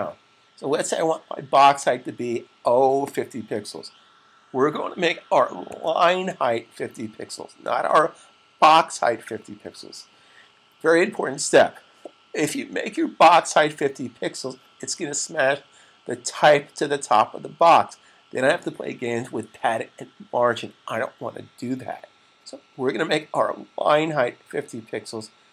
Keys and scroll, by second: 4.9-5.5 typing.